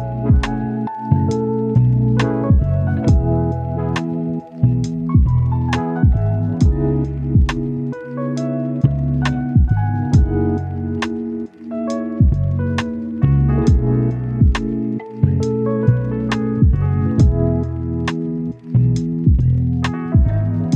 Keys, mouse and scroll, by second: 0.2 click, 3.7 right click, 4.4-5.0 scroll up 1, 5.0 click, 6.2 right click, 6.8 click, 7.6 right click, 7.9 scroll down 1, 8.0 scroll up 1, 8.1 right click, 9.8 click, 10.3 right click, 10.7 scroll down 1, 10.8 scroll up 1, 10.9 right click, 11.6 scroll up 1, 11.7 right click, 12.3 click, 12.5 scroll up 1, 12.6 right click, 13.4-13.8 scroll up 1, 13.8 click, 14.6 scroll down 1, 14.7-15.6 scroll up 2, 14.8 right click, 15.6 click, 15.9 scroll down 1, 16.2 click, 16.4-18.1 right drag, 18.1 scroll up 1, 18.2 right click, 18.7 click, 18.9 right click, 19.4 click, 19.9-20.2 scroll down 1, 20.2 click, 20.3 right click.